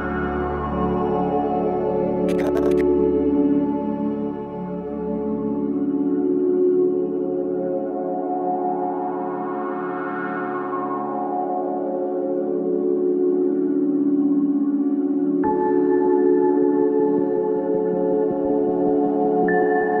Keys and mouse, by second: 3.2-7.4 drag, 10.7 =, 12.0 click, 13.4 click, 14.1 click, 15.0 alt+click, 16.9 click, 19.0 click.